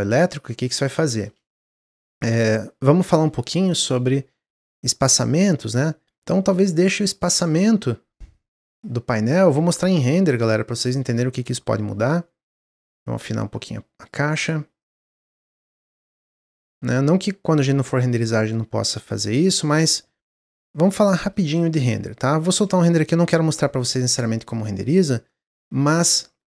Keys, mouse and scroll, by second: 2.1-5.1 drag, 7.3-8.3 drag, 9.3-13.1 drag, 14.7 click, 18.2 click, 19.8-20.2 scroll down 1, 22.1 click, 24.7-25.4 middle drag, 25.4-25.7 scroll up 3, 26.1-26.4 middle drag.